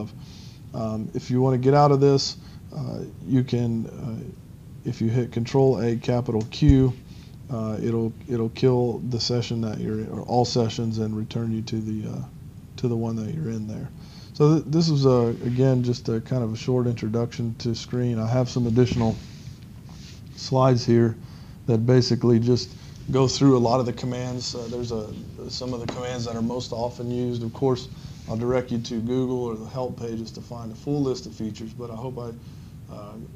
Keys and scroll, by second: 6.5 shift+q.